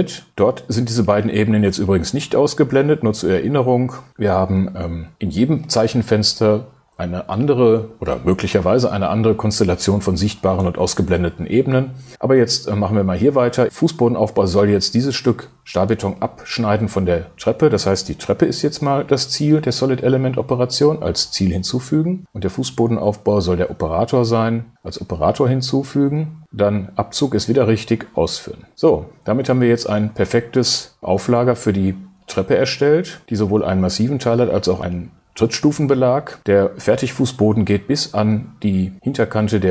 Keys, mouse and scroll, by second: 18.6 shift+space, 23.0 shift+space, 31.0 shift+space.